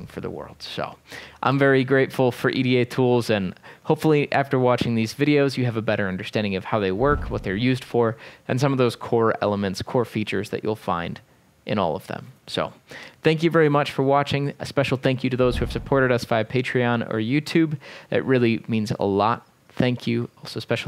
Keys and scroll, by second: 0.8 typing, 5.1 typing.